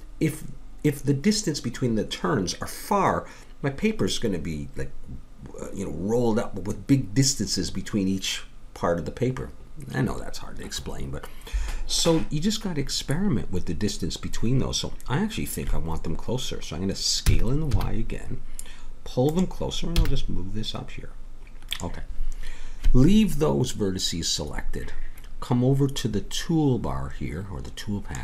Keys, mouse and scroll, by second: 12.5-14.4 middle drag, 17.2 s, 19.9 g, 26.0-27.9 drag.